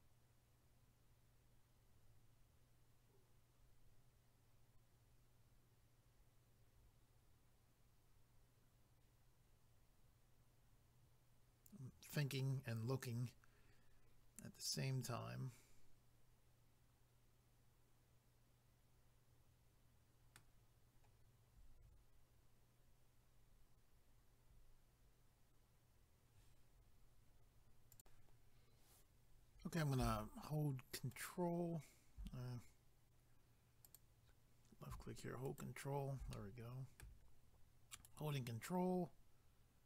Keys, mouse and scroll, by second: 27.9 click, 31.1 ctrl+right click, 33.8 click, 35.5 ctrl+right click, 36.3 middle click, 37.9 ctrl+right click.